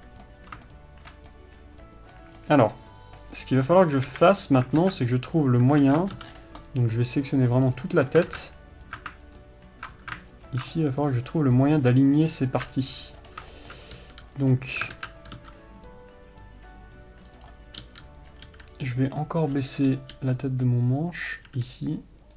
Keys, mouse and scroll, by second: 4.4 KP_3, 5.2 alt+z, 5.4-6.2 scroll up 1, 6.2 alt+a, 7.0 c, 8.7 alt+z, 9.8 ctrl+alt+click, 11.1-15.3 middle drag, 13.0 KP_3, 13.6-13.9 scroll up 1, 14.3 g, 15.3 alt+z, 16.4 c, 18.7 click, 18.8 r, 19.9-20.2 scroll down 1, 20.2 scroll up 1, 20.5 g, 21.6 click, 21.9 r.